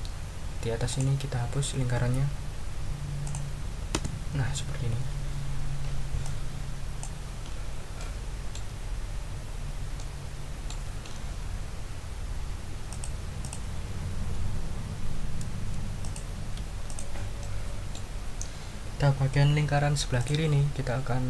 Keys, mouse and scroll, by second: 0.9 click, 2.0 Delete, 3.2 click, 3.9 Delete, 6.2 click, 8.0 click, 9.5 ctrl+scroll up 1, 9.9 ctrl+click, 12.9 click, 13.4 click, 16.0 shift+click, 16.9 shift+click, 17.4-18.1 shift+middle drag, 20.2 click.